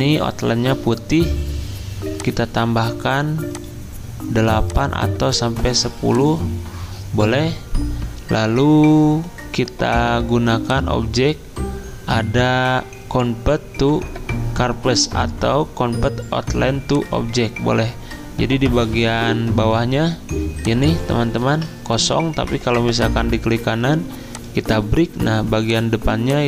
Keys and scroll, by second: 21.5 ctrl+z.